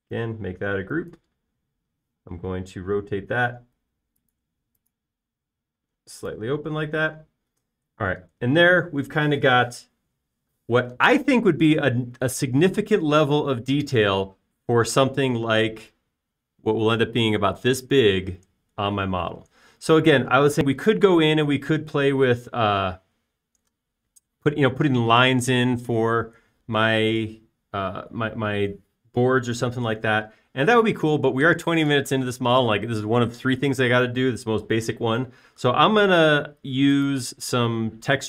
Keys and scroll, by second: 0.2 space, 2.5-3.2 typing, 4.9 Up, 7.8 space.